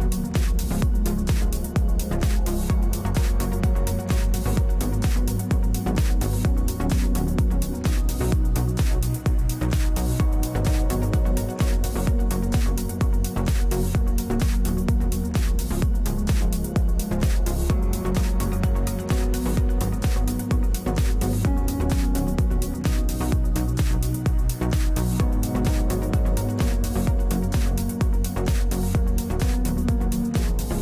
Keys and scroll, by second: 7.7 space, 9.7 space, 19.7 space, 21.5 space, 25.3 space, 28.6 4.